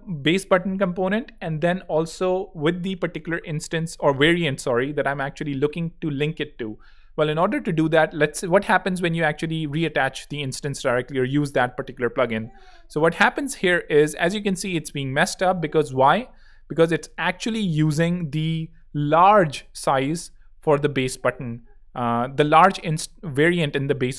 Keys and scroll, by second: 7.7 super+p, 10.3 Return, 20.1 Escape.